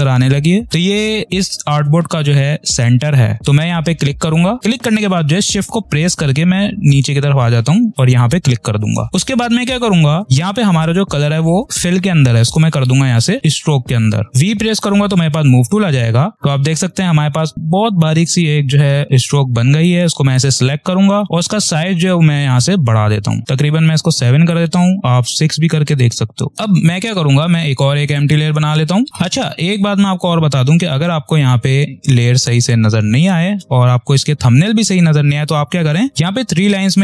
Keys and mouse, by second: 3.5 click, 7.8 shift+click, 15.4 v, 16.3 click, 19.7-21.5 drag, 28.0 click, 36.1 click.